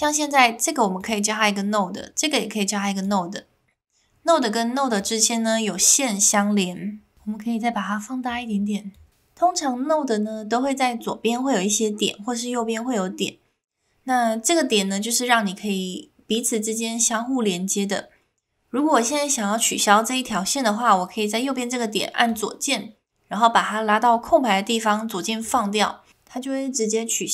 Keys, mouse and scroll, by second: 0.0 click, 2.0 click, 5.0 click, 8.3 click.